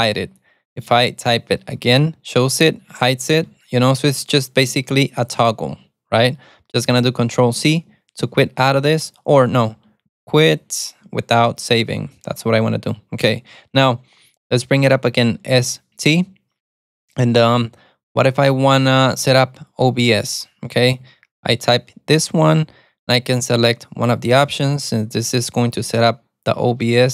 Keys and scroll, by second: 2.9 alt+super+a, 4.2 alt+super+a, 4.8 alt+super+a, 5.5 alt+super+a, 7.6 ctrl+c, 8.6 ctrl+c, 9.7 shift+;, 10.6 shift+1, 11.7 Return, 15.6 alt+super+a, 21.1 Return.